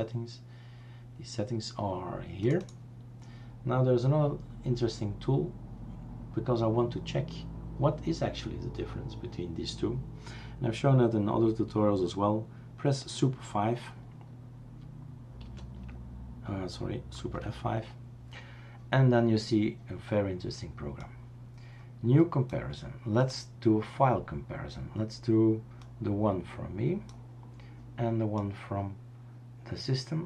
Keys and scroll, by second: 15.6 super+(, 17.2 super+F5.